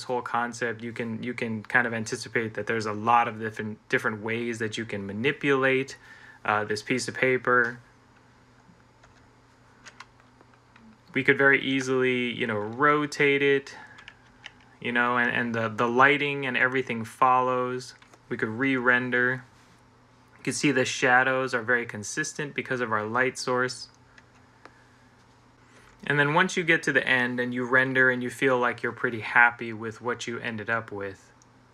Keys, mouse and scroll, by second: 8.9 Escape, 11.5 g, 14.1 Escape, 18.8 F12, 24.0 Escape, 25.6 F12.